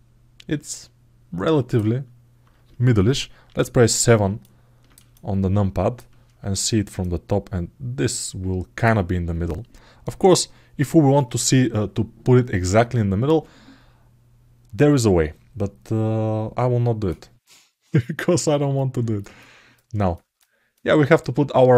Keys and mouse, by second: 0.3-1.5 alt+middle drag, 3.2 KP_7, 4.2 middle click, 4.9 alt+shift+middle click, 6.8-8.6 drag, 18.5 alt+middle click, 19.2 ctrl+alt+middle click, 19.9 ctrl+alt+middle click, 20.5 alt+middle click.